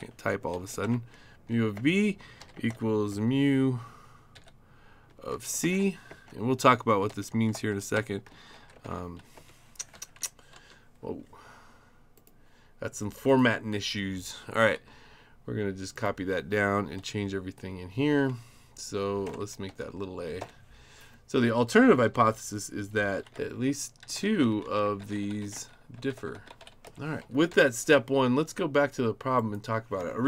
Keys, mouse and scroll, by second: 0.0-3.1 typing, 4.3-8.8 typing, 9.3 Return, 9.9 Up, 10.2 Left, 10.5 Right, 12.2 click, 13.3 click, 14.6 ctrl+d, 15.9 click, 18.2 shift+a, 19.2-20.4 typing, 21.8 Right, 22.0 Right, 22.1 Right, 22.5 Right, 22.9 Right, 23.0 Right, 23.2 Right, 23.3-27.1 typing, 27.2 Down, 27.5 Left, 29.4 click.